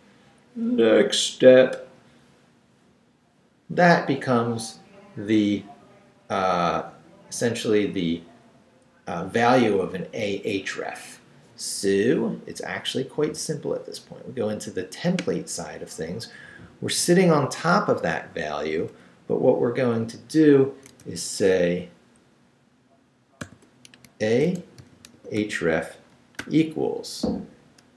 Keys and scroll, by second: 16.7 Left, 18.9 Left, 21.0 i, 21.8 shift+i, 23.4-26.4 typing.